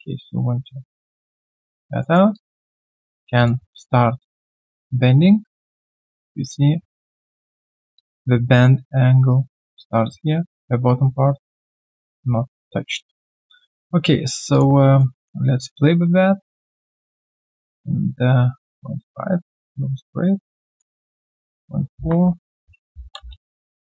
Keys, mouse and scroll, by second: 1.4 middle click, 1.7 alt+click, 2.0 alt+middle click, 2.3 alt+click, 4.2 middle click, 7.9 alt+click, 12.7 alt+click, 15.0 middle click, 22.3-23.4 typing.